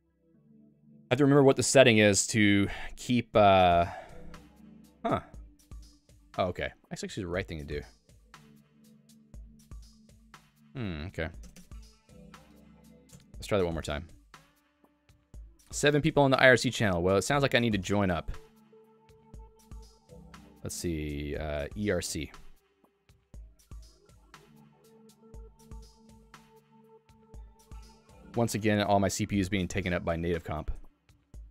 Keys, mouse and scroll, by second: 2.5 Escape, 2.6 Escape, 10.5 ctrl+g, 12.4 Up, 13.2 Return, 27.2 Return.